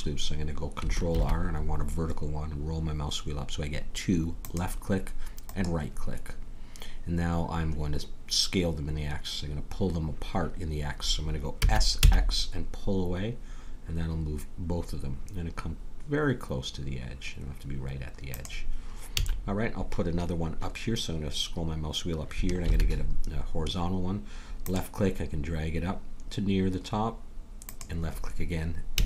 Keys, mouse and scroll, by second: 1.1 ctrl+r, 11.6 s, 19.1 a, 22.7 ctrl+r, 28.9 a.